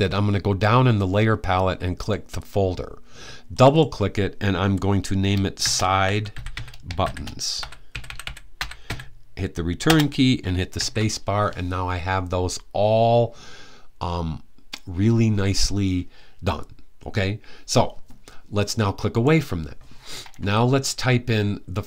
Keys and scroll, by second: 5.1-9.1 typing, 10.5 shift+s.